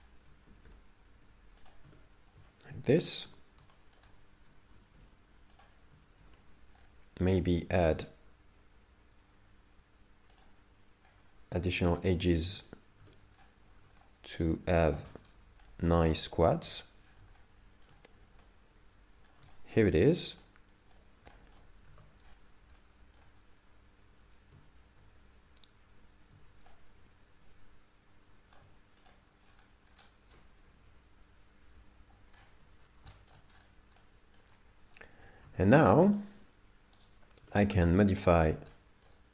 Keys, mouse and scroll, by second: 0.5 g, 1.9 Tab, 2.5 shift+middle click, 3.3 Tab, 3.7 shift+middle click, 4.7 g, 6.2 ctrl+r, 11.7 right click, 12.5 Tab, 12.5 right click, 13.0 Tab, 13.4-14.0 scroll up 6, 14.0 shift+middle click, 15.2-15.6 scroll down 4, 15.6 shift+middle click, 16.7 Tab, 17.0-17.4 scroll down 4, 17.4 shift+middle click, 18.5 middle click, 19.5 shift+middle click, 20.1 scroll up 3, 20.4 middle click, 21.5 shift+middle click, 21.9 alt+a, 22.3-22.7 scroll up 3, 22.9 middle click, 26.7 shift+middle click, 29.1 click, 29.5-30.3 scroll down 10, 31.9 Home, 32.5 scroll up 8, 33.3 shift+middle click, 33.7 scroll up 1, 34.1 middle click, 35.5 alt+a, 36.0 shift+middle click, 36.2 scroll down 5, 37.1 right click, 37.9 Tab, 37.9 middle click, 38.8 middle click.